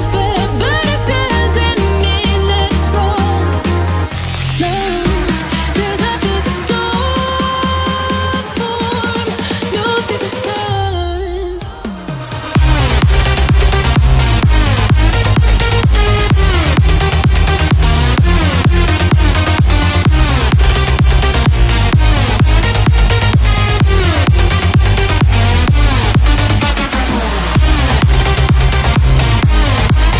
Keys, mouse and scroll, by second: 1.0-1.7 scroll down 1, 2.5 click, 2.6 space, 2.7-3.6 scroll up 1, 3.6 m, 4.2 click, 5.7 Left, 6.7 click, 6.7 click, 6.9 space, 7.0-7.6 scroll down 1, 8.4 middle click, 9.2 click, 9.6 scroll up 1, 9.8 shift+middle click, 10.0 middle click, 10.6 scroll up 1, 11.0 shift+middle click, 11.0 shift+middle click, 12.6 shift+middle click, 13.6 b, 15.1 click, 18.5-19.5 scroll up 1, 19.5 click, 20.9 space, 21.8-25.5 drag, 25.5 space, 27.0 click.